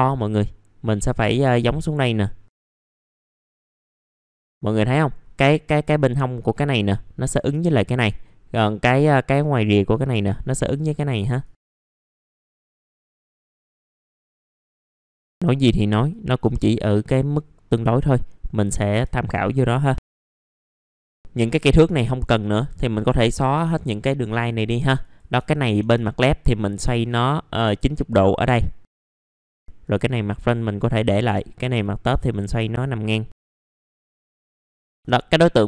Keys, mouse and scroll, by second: 2.5 scroll up 1, 2.6 w, 2.8 click, 3.0 middle click, 3.2 ctrl+right click, 3.5 click, 4.4 right click, 4.7 middle click, 11.1 click, 11.6-12.1 scroll up 2, 11.7 click, 12.1 w, 12.3 click, 12.6 r, 13.1-14.4 drag, 14.4 r, 14.5 click, 14.9 w, 15.1-18.9 drag, 18.9 w, 19.5 click, 20.0 scroll down 1, 20.1 middle click, 20.3 alt+middle click, 20.7 scroll down 1, 20.8 alt+middle click, 21.0 click, 21.1 middle click, 21.5 click, 22.9 Delete, 23.2 click, 23.5 Delete, 23.8 middle click, 24.3-25.0 scroll up 1, 25.0 click, 25.4 alt+middle click, 26.6-29.0 drag, 29.0 w, 29.2 click, 29.6 middle click, 29.8 click, 30.1 middle click, 30.9-33.5 drag, 33.5 middle click, 33.8 click, 33.9 middle click, 34.1 scroll down 1, 34.3 scroll up 1, 34.5 middle click, 34.6 F3, 34.8 middle click.